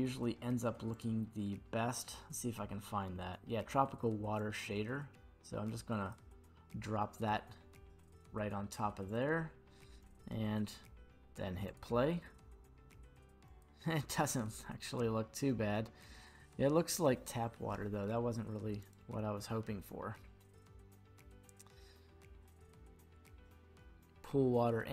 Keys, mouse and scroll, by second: 0.9 click, 4.3 click, 9.0 click, 11.6 click, 13.6 click, 14.8 scroll up 2, 16.0 scroll up 1, 17.2-18.8 scroll down 2, 18.8 click.